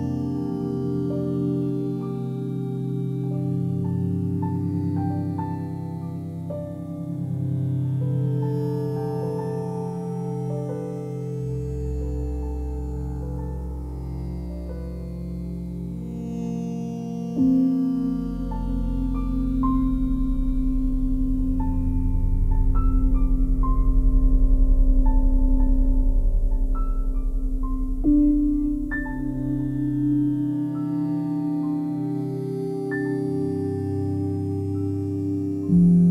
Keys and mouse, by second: 0.0 alt+click, 1.1 click, 1.3 click, 2.7 g, 2.8 g, 3.6 click, 4.5 click, 4.7 click, 5.3 click, 5.5 click, 6.0 click, 6.1 click, 6.8 click, 6.9 click, 7.4 alt+click, 8.3 shift+click, 8.6 shift+click, 8.8 shift+click, 9.2-10.5 alt+drag, 10.5 g, 10.6 g, 12.0-13.6 alt+drag, 13.2 ctrl+z, 14.6 ctrl+click, 15.3 shift+click, 15.9 shift+click, 16.2 alt+click, 16.9 shift+click, 17.2 alt+click, 17.6 alt+shift+click, 18.3 g, 18.4 g, 19.3-22.9 alt+drag, 23.3 click, 24.5 g, 25.4 click, 26.2 click, 27.1 alt+click, 28.7 g, 28.8 g, 29.4 click, 30.0 alt+click, 30.5-33.1 ctrl+alt+drag, 34.3-35.4 ctrl+alt+drag.